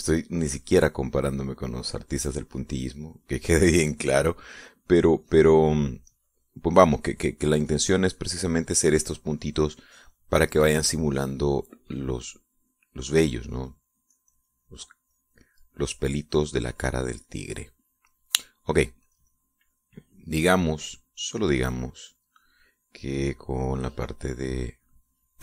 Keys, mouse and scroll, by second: 0.2-2.5 drag, 2.6-8.9 drag, 9.2-11.2 drag, 11.2-20.3 drag, 22.0 click, 22.4-25.4 drag.